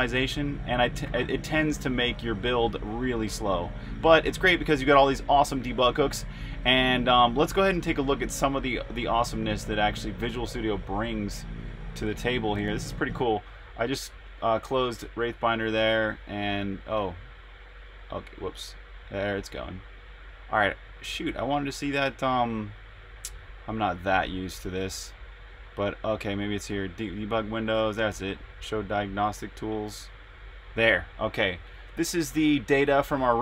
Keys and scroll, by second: 0.8-7.5 typing.